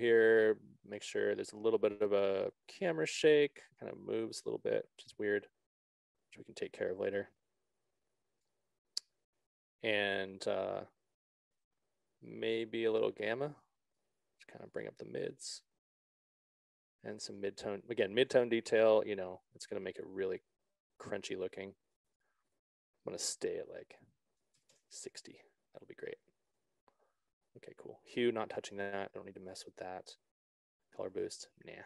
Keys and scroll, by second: 24.9 6, 25.4 Return.